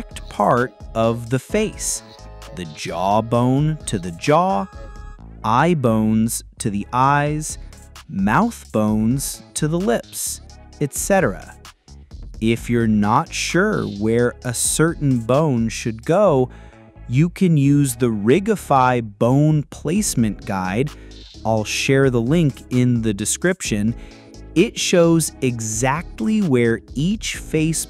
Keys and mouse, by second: 0.7 click, 1.2 middle click, 1.3 middle click, 1.5 middle click, 1.7 middle drag, 1.9 g, 2.0 middle click, 2.2 g, 2.6 click, 2.7 middle click, 2.9 shift+middle click, 3.2 click, 3.7 g, 3.7 click, 4.2 click, 4.8-8.0 typing, 4.9 click, 6.3 click, 6.9 click, 7.9 click, 9.0 click, 9.1 g, 9.3 ctrl+click, 9.5 click, 9.6 g, 9.9 ctrl+click, 10.1 click, 10.6-13.8 typing, 10.8 click, 11.4 click, 12.8 click, 13.6 click, 14.0-15.3 middle drag, 15.3 click, 15.3 middle click, 15.5 click, 15.8-18.1 typing, 16.6 click, 17.0 click, 17.2 click, 19.4 h, 19.5 click, 19.5 h, 19.6 click, 19.7 g, 19.9 click, 20.3 click, 20.5 ctrl+g, 21.1-23.2 typing, 22.2 click, 22.7 click, 23.1 click, 23.6 click, 23.7 ctrl+g, 24.3 ctrl+g, 24.6 click, 25.1 click, 25.2 g, 25.7 ctrl+click, 26.1 ctrl+z, 26.3 g, 26.4 click, 26.8 click, 26.9 g, 27.1 click, 27.4 ctrl+click, 27.8 click.